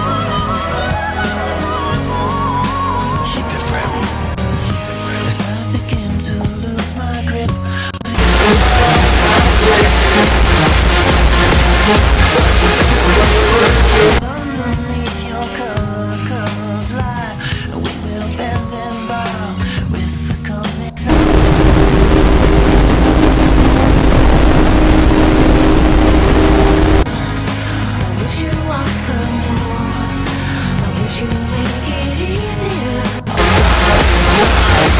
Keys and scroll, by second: 3.3 a, 3.6 Up, 3.8 Return, 14.2 Page_Down, 27.0 Page_Down.